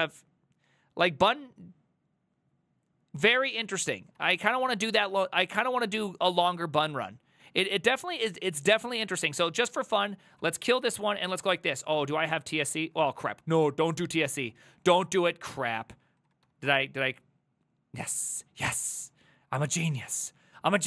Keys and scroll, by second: 4.2 alt+{, 5.5 Up, 6.4 ctrl+Left, 7.1 ctrl+Left, 7.1-8.0 ctrl+Left, 8.1 ctrl+Right, 8.9 ctrl+a, 9.1 3, 9.3 ctrl+c, 9.5 ctrl+c, 9.6-10.5 ctrl+c, 10.9-12.8 typing, 11.3 ctrl+c, 13.1 ctrl+c, 13.3 ctrl+c, 13.6 ctrl+a, 13.9 1, 14.4 ctrl+c, 14.6 ctrl+a, 14.9-16.9 typing, 18.1 ctrl+a, 18.7-20.8 typing.